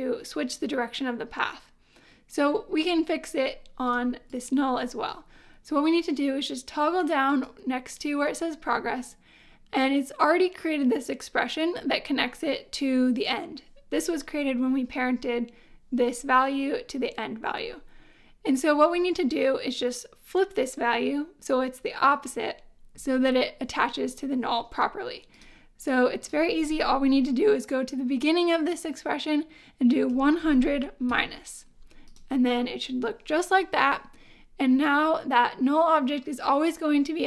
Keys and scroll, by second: 30.1 1, 30.4 0, 31.1 -.